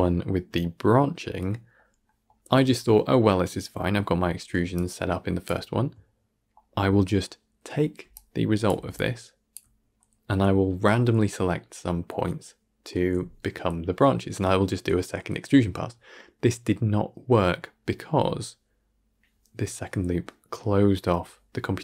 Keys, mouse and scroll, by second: 4.6-21.8 drag.